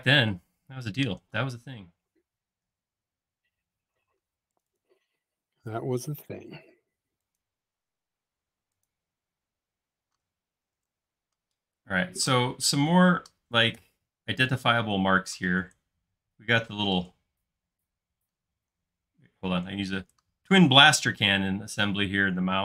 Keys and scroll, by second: 3.0 l, 4.1 space, 5.2 l, 9.6 space, 10.8 super+z.